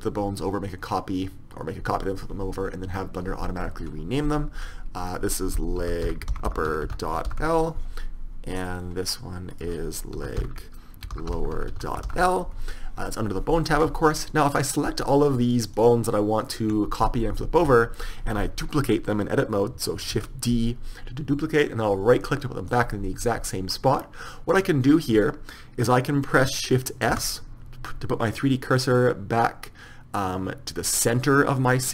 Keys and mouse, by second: 5.2-6.7 drag, 6.7 p, 8.7 click, 9.7 middle click, 10.5-11.5 right drag, 14.7-18.4 right drag, 20.3 shift+d, 27.2 shift+s.